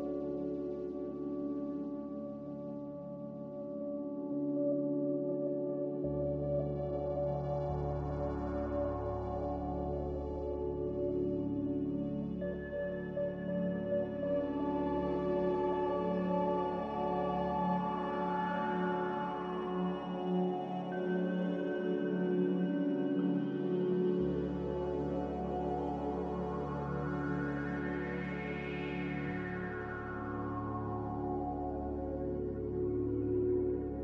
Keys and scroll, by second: 0.4 Delete, 23.3 Delete, 25.6 Delete, 27.7 Delete.